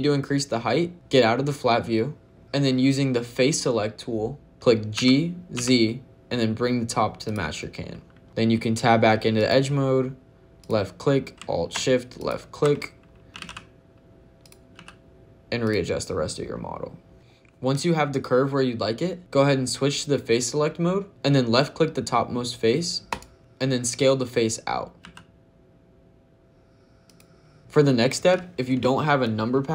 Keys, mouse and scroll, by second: 1.4 scroll down 2, 1.8 middle click, 2.4 shift+middle click, 2.4-3.4 scroll up 1, 4.8 g, 5.4 z, 7.1 click, 9.2 click, 10.5 click, 12.0 alt+shift+click, 13.2 g, 13.2 z, 14.3 click, 14.6 s, 15.5 click, 17.1 Tab, 19.2 click, 21.1 click, 22.9 click, 24.9 ctrl+shift+s, 26.9 click.